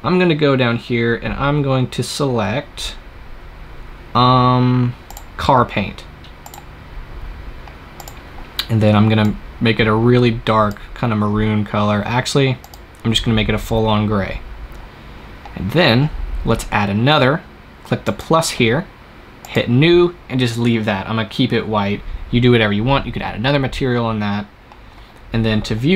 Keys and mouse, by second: 0.4-5.0 middle drag, 5.0-11.5 drag, 15.5-17.9 middle drag, 17.9-21.3 drag.